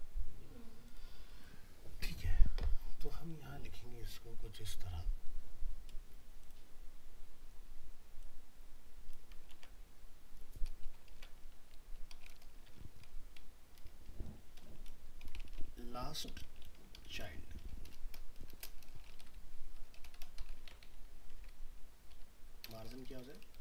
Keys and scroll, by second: 1.9 alt+Tab, 9.5 ctrl+c, 12.7 ctrl+v, 20.6 ctrl+c, 21.3 ctrl+v.